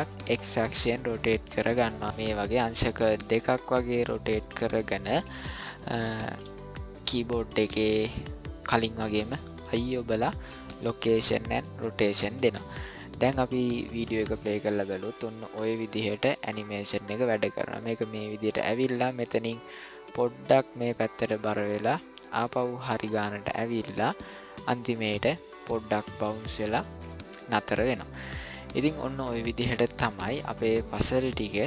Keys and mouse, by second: 2.7 r, 6.2 r, 9.6 i, 14.1-27.5 drag, 28.3-29.4 middle drag, 29.7-30.3 shift+middle drag, 30.7-31.6 middle drag.